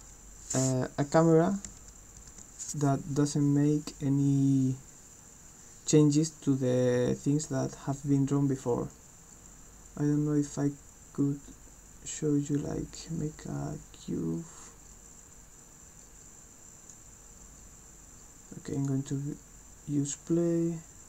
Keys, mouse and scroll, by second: 8.9-12.9 drag, 15.0-16.9 drag, 18.7 click.